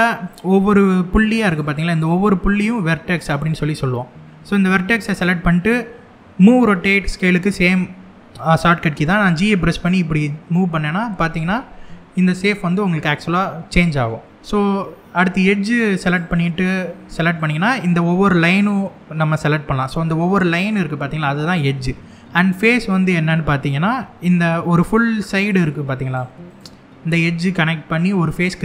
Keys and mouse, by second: 1.2 click, 8.8 g, 14.0 right click, 15.6 click, 17.0 click, 25.2 click, 25.7 click, 26.1 click.